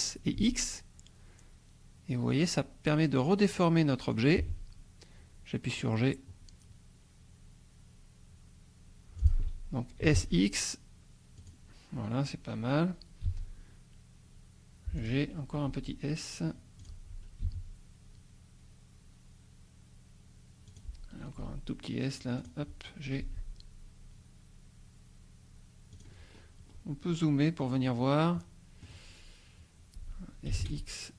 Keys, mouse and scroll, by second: 0.4 x, 4.1 click, 4.4 g, 9.2 click, 10.0 s, 10.1 x, 11.4-13.2 drag, 13.2 g, 15.0 click, 15.7 s, 16.8 click, 17.4 g, 20.7 click, 21.4 s, 22.4 click, 23.2 g, 25.9 click, 26.3-26.9 scroll up 1, 27.7-30.5 middle drag, 30.5 s, 30.6 x.